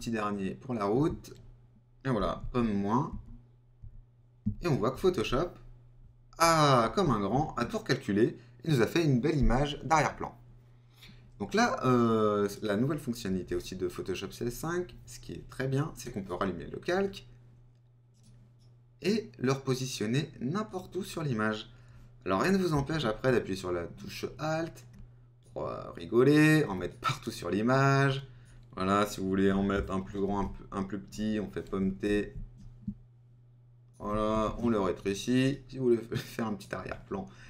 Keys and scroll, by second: 2.6 super+-, 4.6 super++, 30.3 super+t.